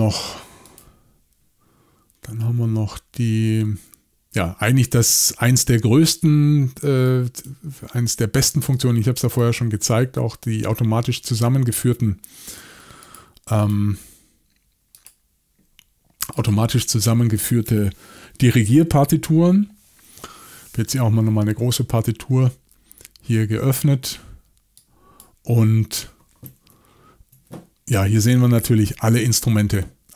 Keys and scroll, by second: 28.6-29.2 typing.